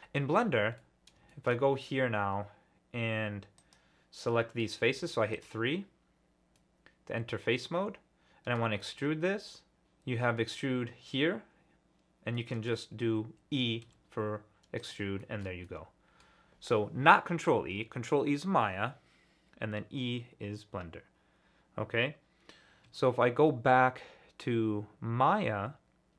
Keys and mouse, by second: 0.8-1.5 middle drag, 2.3 2, 4.3-4.6 drag, 4.9 3, 6.5-8.6 drag, 8.6-9.0 shift+middle drag, 12.3 click, 13.8 e, 14.8 click, 15.2 shift+middle click, 15.6 click.